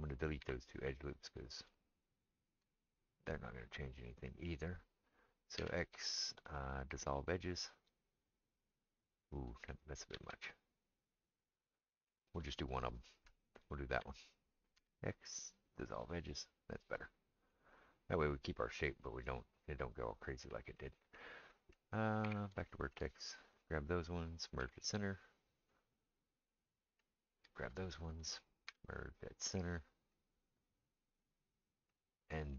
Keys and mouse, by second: 0.4 2, 2.1 alt+shift+click, 2.2-13.3 alt+shift+middle drag, 5.6 x, 10.1 ctrl+z, 13.3 alt+click, 13.5-23.6 alt+middle drag, 14.8 x, 22.2 1, 23.6-32.5 drag, 24.6 m, 28.7 m.